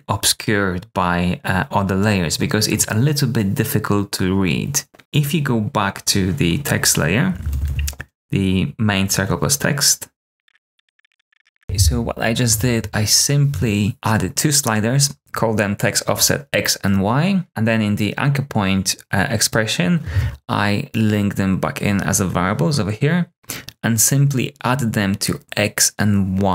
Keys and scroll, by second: 7.3 super+a, 7.4 s, 7.6 s, 10.3 ], 10.4 Return, 10.4 Tab, 10.5 super+d, 10.7 shift+y, 11.0 BackSpace, 11.4 super+c, 11.4 space, 11.6 super+Return.